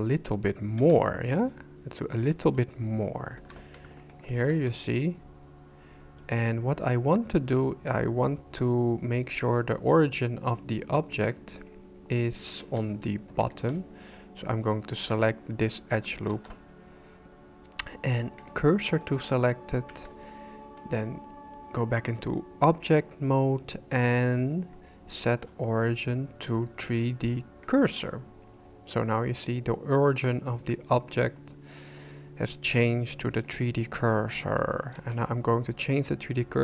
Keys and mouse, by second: 0.8 b, 3.3 shift+c, 4.0 shift+click, 4.5 Tab, 12.6 Tab, 13.4 alt+right click, 16.3 shift+s, 19.9 Tab, 23.0-27.8 drag, 32.8 middle click, 35.0 shift+s.